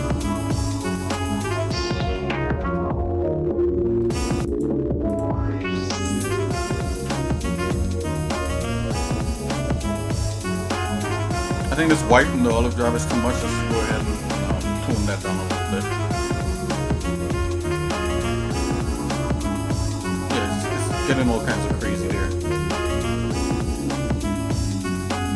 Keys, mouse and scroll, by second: 1.3 click, 2.7-4.0 shift+middle drag, 4.5 click, 7.0 Delete, 8.1 shift+middle click, 11.2 shift+middle click, 19.5 shift+middle click.